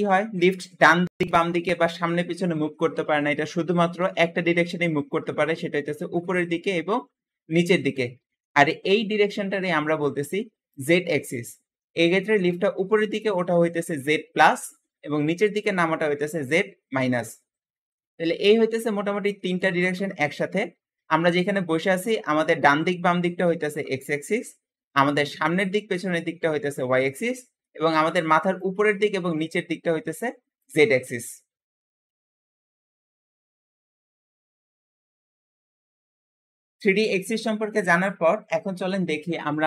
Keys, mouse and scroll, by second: 3.9 g, 8.3-8.8 shift+middle drag, 8.8-11.7 scroll down 1, 11.7 shift+middle click, 12.1 g, 17.4-17.8 scroll down 2, 17.8-27.5 middle drag.